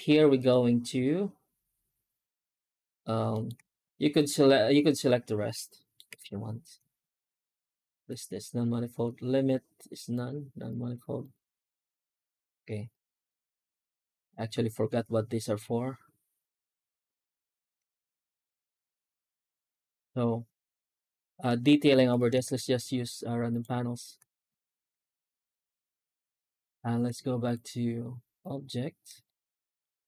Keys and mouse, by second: 3.2 alt+middle click, 4.0-5.8 middle drag, 5.9 F9, 17.8 shift+middle click, 18.2 middle click, 18.8 shift+middle click, 19.1 middle click, 21.8 Tab, 22.3 shift+q, 27.5-28.8 drag, 29.1 shift+middle click, 29.7-30.0 middle drag.